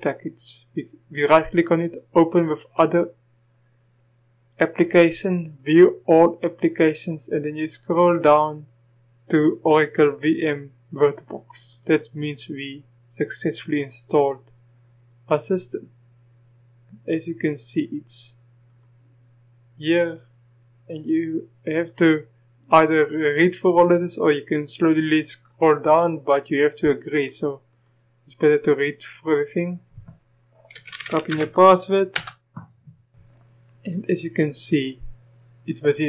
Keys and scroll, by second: 30.7-31.4 typing, 32.1 Return.